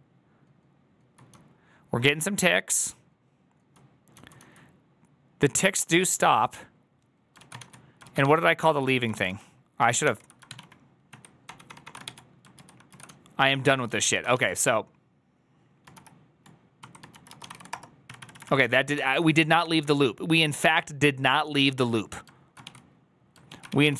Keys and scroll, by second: 1.2-3.7 j, 4.0 j, 4.4 j, 7.7-9.2 typing, 9.0 ctrl+w, 9.9 ctrl+h, 10.4 ctrl+w, 10.4 ctrl+o, 11.0 ctrl+s, 11.4 ctrl+d, 11.9 ctrl+d, 11.9 shift+g, 12.7 ctrl+u, 13.0 ctrl+u, 13.0-14.7 typing, 15.8-18.8 typing, 18.8 ctrl+d, 19.5 ctrl+d, 21.6 ctrl+d, 22.5 shift+a, 23.3 ctrl+a, 23.6 [, 23.8 ctrl+u.